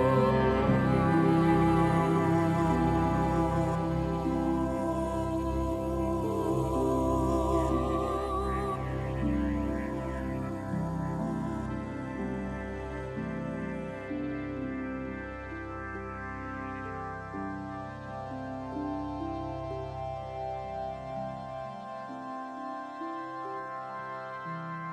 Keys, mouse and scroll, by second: 1.0 super+z, 17.5 shift+d, 19.6-24.9 drag.